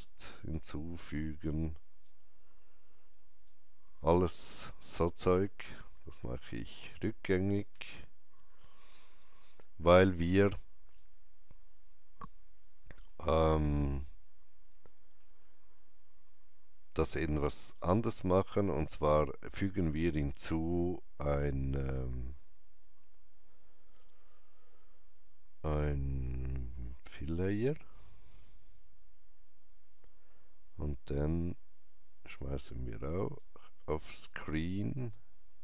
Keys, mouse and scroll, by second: 4.9 ctrl+z, 10.1-17.4 alt+drag, 13.0 alt+middle click, 20.0-22.7 alt+drag, 20.0 alt+middle click, 27.0 click, 27.0 alt+middle click, 31.1 click.